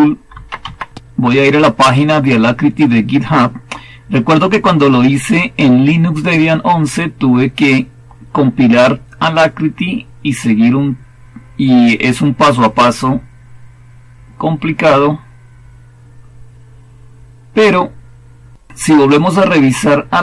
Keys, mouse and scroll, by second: 0.0-1.3 typing, 13.7-17.6 scroll down 1, 17.6-18.4 scroll down 1, 18.4-19.1 scroll down 1, 19.1-20.2 scroll down 1.